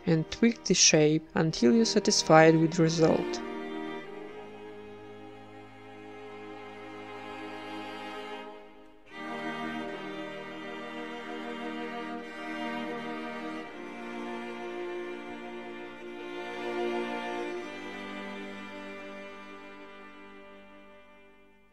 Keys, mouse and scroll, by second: 0.7-2.4 middle drag, 0.8 ctrl+b, 4.7 a, 4.9-5.9 right drag, 5.2 g, 5.9 alt+s, 6.8 middle click, 7.0 ctrl+r, 7.8 middle click, 8.0 z, 8.4 z, 8.8 z, 9.5 ctrl+Tab, 9.8 click, 10.1-11.1 right drag, 10.8 ctrl+KP_Add, 10.9 ctrl+KP_Add, 11.2 ctrl+KP_Add, 11.3 ctrl+KP_Add, 11.7 KP_1, 12.1 s, 13.2 g, 14.0 s, 15.5 g, 16.3 middle click, 16.6 ctrl+KP_Add, 17.0-21.7 typing, 17.8 middle click, 17.9 Tab, 18.5 ctrl+2, 19.4 Tab, 21.1 right click, 21.6 middle click.